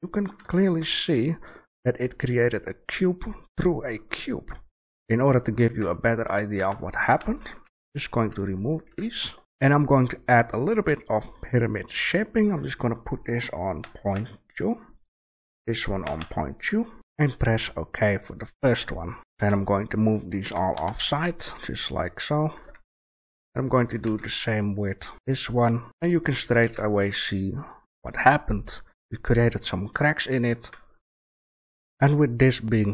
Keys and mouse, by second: 4.6 middle click, 5.5-6.5 middle drag, 6.5 Tab, 7.5 Delete, 8.0 right click, 8.1 Delete, 8.7 right click, 8.8 Delete, 9.4 shift+a, 18.8-19.2 middle drag, 19.2 g, 19.3 a, 19.6 right click, 20.4 g, 22.6 a, 24.0 shift+a, 25.8 g, 25.8 a, 26.6 a, 26.9-28.6 drag, 31.9-32.9 right drag.